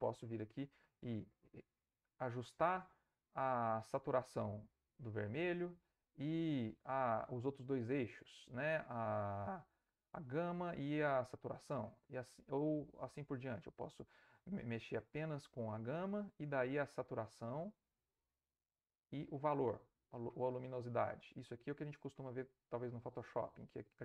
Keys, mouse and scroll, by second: 1.0 click, 2.2-6.3 drag, 10.0-11.7 drag, 12.5 click, 15.0-16.5 drag, 16.9-23.2 drag.